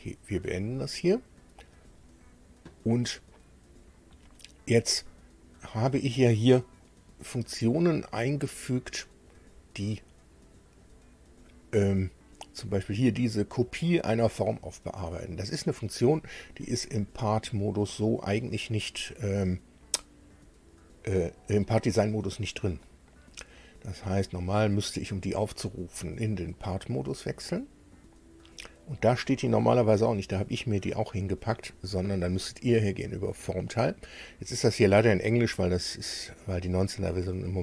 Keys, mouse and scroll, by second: 0.5 click, 9.3 click, 9.9 click, 10.8 click, 25.7 click, 26.6 click, 33.0 click.